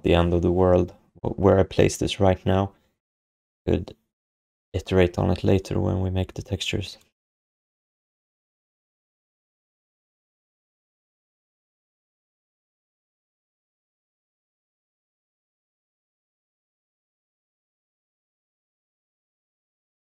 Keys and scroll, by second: 15.5 e, 17.2 w.